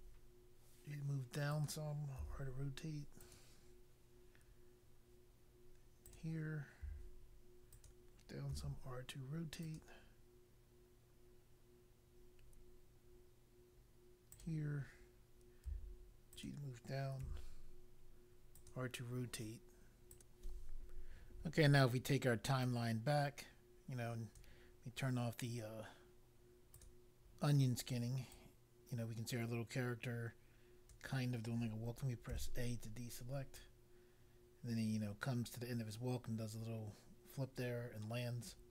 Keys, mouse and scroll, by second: 1.4 click, 2.2 r, 3.2 click, 6.0 click, 6.8 g, 7.6 click, 8.5 r, 9.6 click, 14.3 click, 15.6 g, 16.4 click, 17.2 r, 18.6 click, 20.1 click, 22.6 right click, 26.7 click, 28.3 right click, 32.2 a, 33.5 right click.